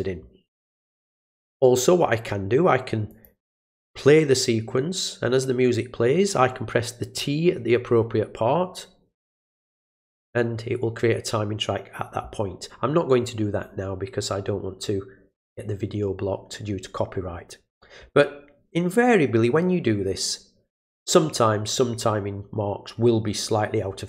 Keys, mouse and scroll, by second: 3.1 click.